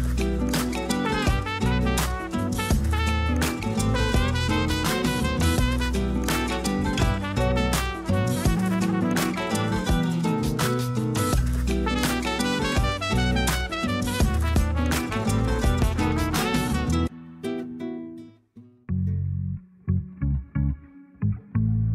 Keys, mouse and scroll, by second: 0.0-0.6 middle drag, 0.6-1.0 scroll up 1, 1.0-4.1 drag, 6.5 click, 7.6 middle click, 8.1 scroll up 2, 9.1-12.1 drag, 12.8 click, 19.8-21.9 drag.